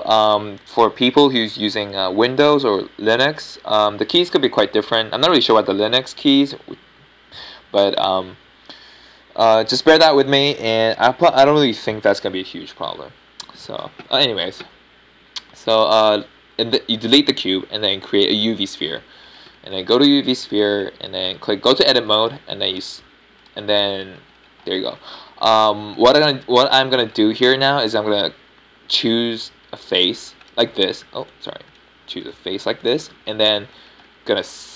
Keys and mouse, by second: 0.8 shift+a, 20.6-22.8 middle drag, 23.6 Tab, 24.6-28.1 middle drag, 29.8-34.7 right drag.